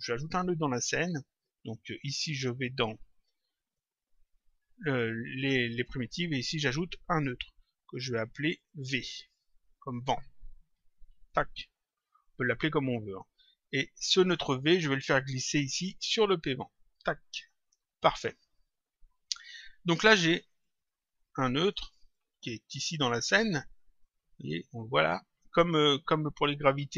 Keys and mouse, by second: 3.6 click, 7.0 click, 8.3 click, 12.2 click, 13.6 click, 15.5 click, 18.3 click, 21.6 click, 23.0 click.